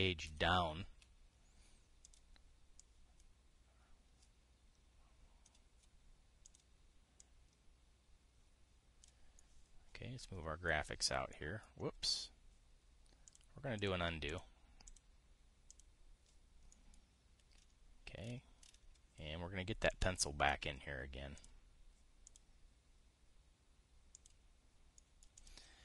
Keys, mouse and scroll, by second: 1.0 shift+Page_Down, 2.8 click, 3.5-6.3 drag, 7.2 click, 7.9-9.8 drag, 10.1-14.1 drag, 14.5 click, 15.0 click, 15.6 click, 16.4 click, 20.6 click, 20.9 click, 22.0 click, 23.0 click, 24.8 click.